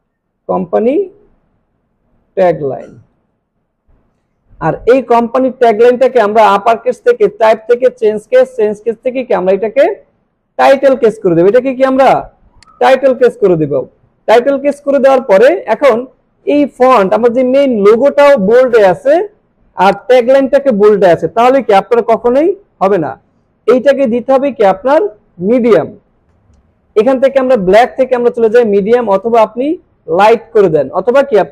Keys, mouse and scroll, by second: 0.4-3.9 typing, 6.0 click, 12.6-15.3 drag, 17.6 click, 19.9 click, 27.5 click.